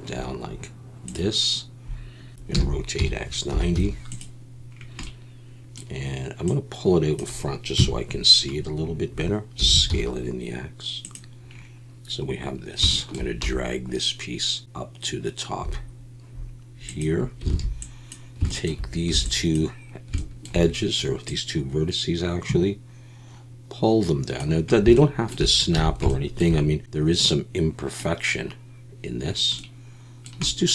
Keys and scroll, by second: 2.5 r, 3.0 x, 3.5 9, 3.7 0, 7.8 KP_1, 9.6 s, 9.9 x, 13.4 g, 17.5 alt+a, 19.1 b, 25.8 a.